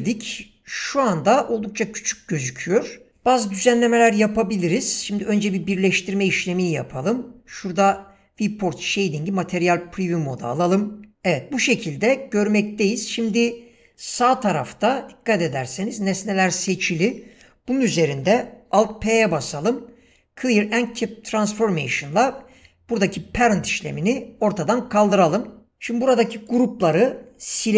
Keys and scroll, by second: 18.8 alt+p.